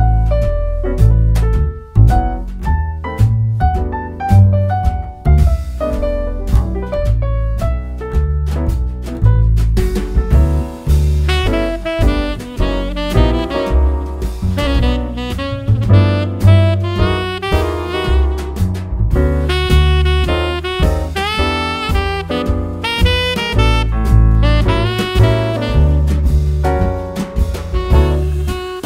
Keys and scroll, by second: 0.5 ↻, 2.2 super+c, 6.3 super+v, 12.4 Right, 16.6 super+c, 22.5 super+v.